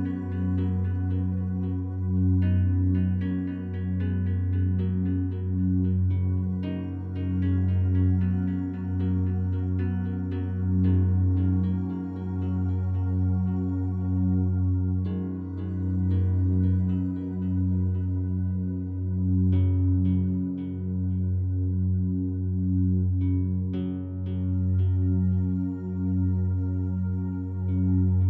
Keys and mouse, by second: 0.0-2.3 drag, 3.9 click, 5.9-6.7 drag, 7.1-8.1 drag, 8.1 click, 9.9 g, 10.2 z, 11.8-12.8 shift+drag, 13.8-15.3 alt+drag, 16.7-20.2 drag, 22.9-23.8 drag, 24.0-27.0 drag.